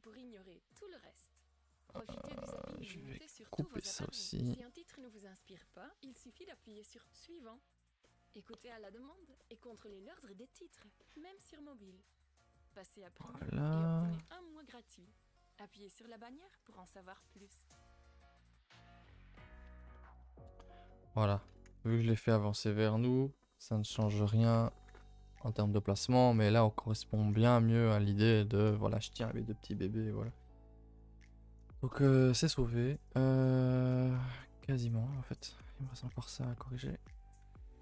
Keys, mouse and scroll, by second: 0.2 alt+shift+Left, 0.4-2.5 middle drag, 2.5 alt+click, 3.2 alt+click, 3.4 middle click, 4.2-6.7 typing, 4.4 middle click, 6.4 middle click, 8.0 middle click, 8.5-8.8 scroll up 1, 8.8 middle click, 9.1 scroll down 2, 9.4-10.7 shift+middle drag, 10.7 scroll up 2, 11.0-12.3 middle drag, 12.3 click, 12.8-14.1 middle drag, 14.1 g, 15.6-16.1 middle drag, 16.1 Tab, 16.3-16.9 middle drag, 16.9 scroll up 1, 17.1 a, 17.2 a, 17.3-18.8 middle drag, 18.8 scroll down 1, 19.0-19.7 middle drag, 19.7 scroll down 2, 19.9-20.5 middle drag, 20.5 KP_0, 21.1 scroll down 1, 23.9 scroll down 1, 24.1 middle drag, 24.6 a, 24.7 a, 25.4 shift+middle click, 26.3 scroll up 1, 26.6-27.3 middle drag, 27.3-27.7 scroll up 5, 27.7-30.3 middle drag, 30.3-30.7 scroll up 1, 30.7-31.0 middle drag, 31.0 scroll up 1, 31.2 Tab, 31.3-32.2 middle drag, 32.2-33.0 scroll down 1, 33.0 click, 33.4 middle click, 33.9 a, 34.0 a, 34.2 middle click, 35.1 middle click, 35.3 scroll up 2, 35.9 alt+click, 36.1 middle click, 36.7 alt+click, 37.6 alt+click.